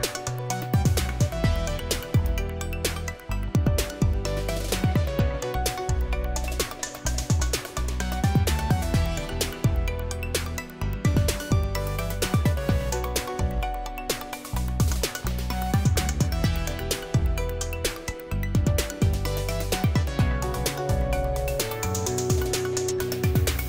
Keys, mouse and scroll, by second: 0.8-1.3 scroll down 1, 3.1-5.1 typing, 6.5-9.1 typing, 12.5-13.4 scroll up 1, 14.3-15.1 scroll up 2, 15.9-16.6 scroll up 1, 17.4-18.2 scroll down 1, 18.2-19.3 scroll up 2, 20.4-21.6 scroll up 1, 21.7-22.5 scroll down 2, 22.5-23.6 scroll down 2.